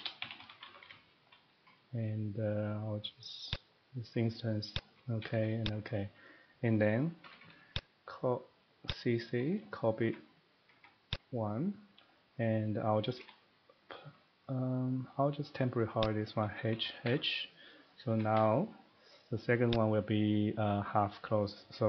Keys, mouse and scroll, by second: 0.0-0.8 typing, 3.3-4.0 typing, 7.0 middle click, 7.2 typing, 7.7 click, 8.9 click, 9.7 middle click, 10.0 Escape, 10.6 Escape, 10.8 Escape, 11.1 click, 12.1 middle click, 12.3 middle click, 13.1 middle click, 13.2 a, 14.4 middle click, 15.0 Escape, 16.0 click, 16.7 typing, 17.9 middle click, 18.2 Escape, 18.3 Escape, 19.7 click, 21.7 middle click.